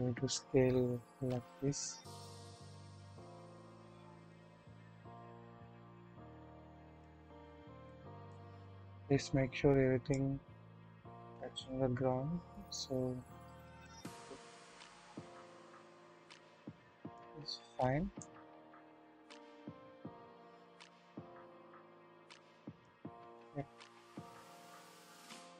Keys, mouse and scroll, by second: 4.1 click, 4.9-7.1 drag, 7.9 click, 8.6 scroll up 1, 10.1-14.8 drag, 10.1 typing, 15.0-16.0 scroll down 1, 16.0 typing, 16.3 click, 17.1-18.1 scroll up 2, 18.1-22.9 drag, 18.3 typing, 22.9-24.1 middle drag, 23.1-24.1 scroll down 1, 24.1 click, 24.9 middle click, 24.9-25.3 scroll down 1, 25.3-25.5 drag.